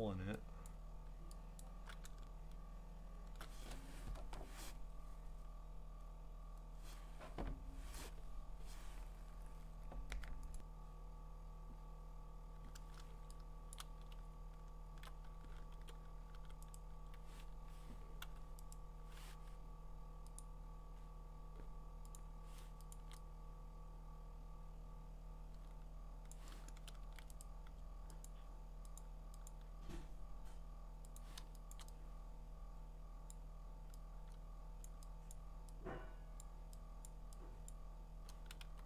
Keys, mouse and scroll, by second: 0.0 click, 0.7 click, 1.6 click, 2.0-3.3 scroll, 10.6 click, 14.3-15.1 scroll, 15.7-16.8 typing, 16.8 right click, 17.5 Escape, 18.2 u, 18.7 right click, 20.4 click, 22.2 click, 26.3 click, 27.0 ctrl+z, 27.4 right click, 28.3 click, 29.0 click, 29.5 click, 31.2 click, 31.7 click, 33.3 click, 35.3 click, 36.4 click, 37.1 click, 37.7 click, 38.6 b.